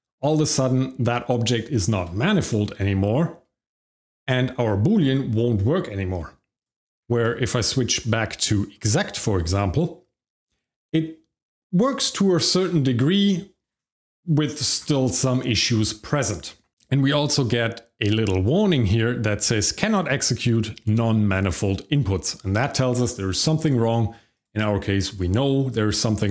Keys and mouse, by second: 0.3 shift+middle click, 1.7 shift+middle click, 2.8 shift+middle click, 6.6 click, 7.0 Tab, 7.5 click, 7.9 click, 9.3 click, 18.0 click, 24.3 click, 25.0 click, 25.9 Tab.